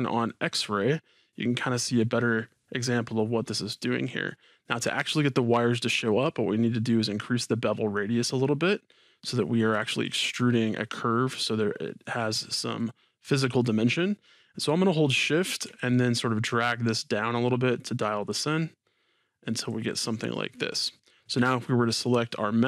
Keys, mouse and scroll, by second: 0.2 click, 0.9-7.2 middle drag, 7.2-12.9 drag, 15.9-20.3 shift+drag, 20.3-22.0 middle drag, 22.0-22.6 drag.